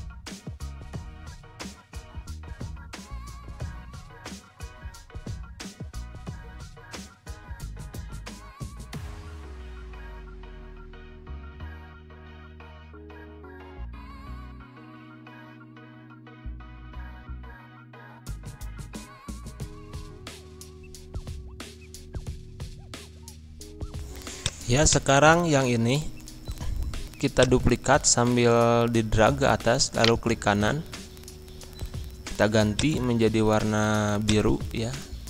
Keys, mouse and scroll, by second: 3.4 g, 3.7-9.0 drag, 10.1 g, 10.3-15.1 drag, 15.1-20.0 shift+drag, 20.7 click, 21.2 scroll down 1, 21.5-22.6 drag, 22.6 right click, 22.8 click, 23.0 scroll down 1, 23.2 z, 23.3 click, 23.8 Pause, 24.4 click, 25.6 ctrl+z, 27.3-29.9 drag, 29.9 right click, 32.7 click.